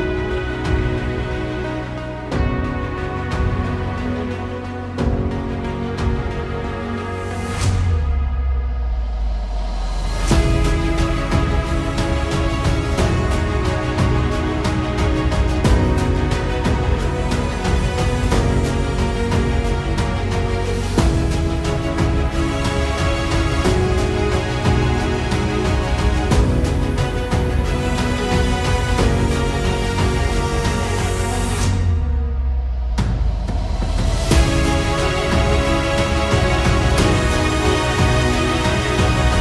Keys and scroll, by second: 4.1 ctrl+z, 9.2 ctrl+z, 11.3 ctrl+z, 11.3 ctrl+z, 14.0 ctrl+z, 14.6 ctrl+z, 18.1 ctrl+z, 20.0 ctrl+z, 20.0 ctrl+z, 21.7 ctrl+z, 23.6 Tab, 24.0 Tab, 25.1 shift+KP_0, 25.4 Tab, 30.1 a, 36.4 Tab, 39.1 KP_0.